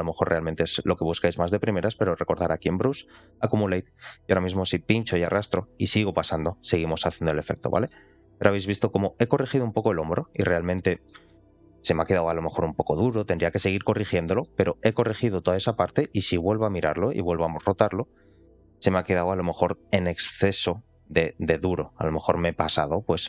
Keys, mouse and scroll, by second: 2.2 click, 4.7 click, 7.8 middle click, 8.5 click, 9.5-9.9 scroll down 3, 9.9 middle click, 10.6 scroll down 1, 10.9 middle click, 11.4-12.0 scroll up 1, 12.0 click, 12.0-12.4 scroll up 1, 13.5 scroll down 1, 13.8 middle click, 14.1 shift+middle click, 15.5 click, 16.1 shift+middle click, 17.1 r, 18.9 middle click, 19.1 middle click.